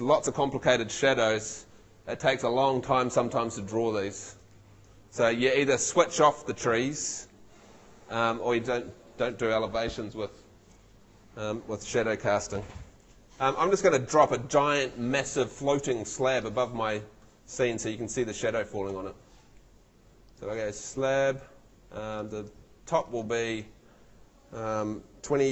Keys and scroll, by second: 13.4 Escape, 14.2 F2, 18.9 Escape, 25.4 2.